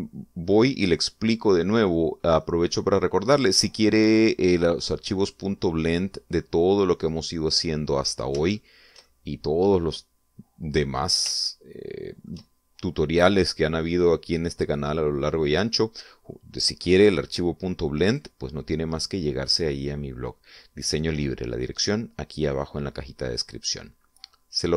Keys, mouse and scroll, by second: 2.9-3.3 scroll down 2, 3.6-8.3 middle drag, 8.5-9.0 scroll up 2, 9.2-9.5 scroll up 2, 9.7 shift+middle click, 10.6 middle click, 12.6-13.6 shift+middle drag, 19.2 right click.